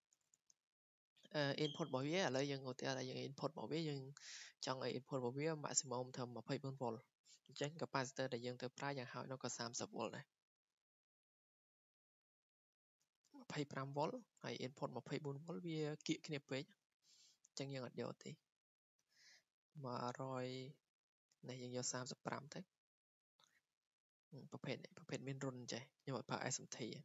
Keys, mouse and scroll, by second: 0.9 click, 20.2 click, 20.4 click, 20.5 click, 20.7 click, 23.2 click, 26.9 click.